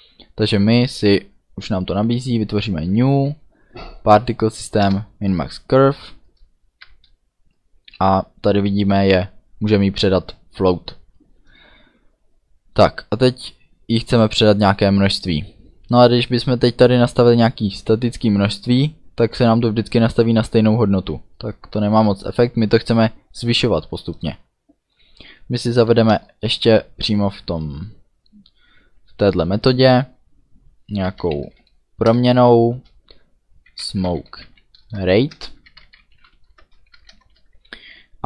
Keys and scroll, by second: 4.8 Return, 6.8 shift+9, 8.0 Down, 25.2 Return, 25.8 Up, 26.1 Return, 30.8-37.2 typing, 32.1 Return.